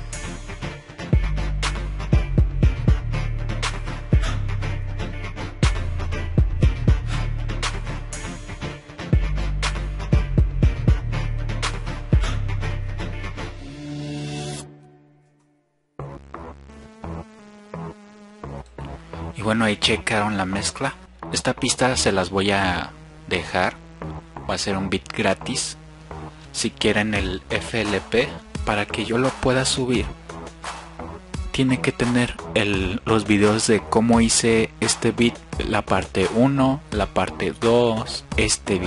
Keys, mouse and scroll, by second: 17.5 F1.